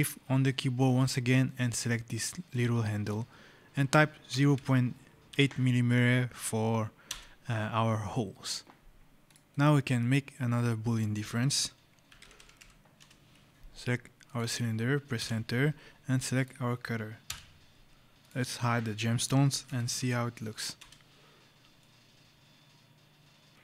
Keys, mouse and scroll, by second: 2.3 shift+click, 4.1 KP_0, 5.2 KP_8, 6.9 Return, 9.1 click, 9.4 right click, 11.7-13.0 typing, 14.1 click, 15.0 Return, 17.1 Return, 18.1 click, 18.9-20.2 typing, 20.7 Return, 21.7 right click, 23.5 right click.